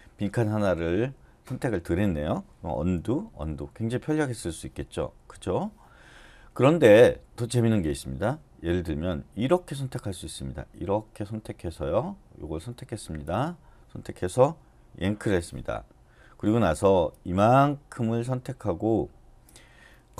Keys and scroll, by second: 3.0 u, 3.4 u, 4.4 u, 15.1 y.